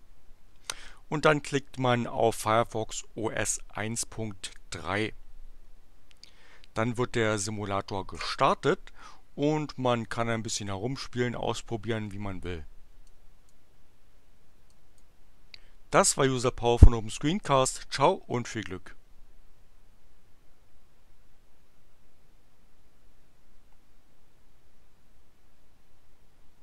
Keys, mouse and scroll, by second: 4.4 click, 8.3-10.0 drag, 13.0-13.7 drag, 14.6 click, 18.3 click.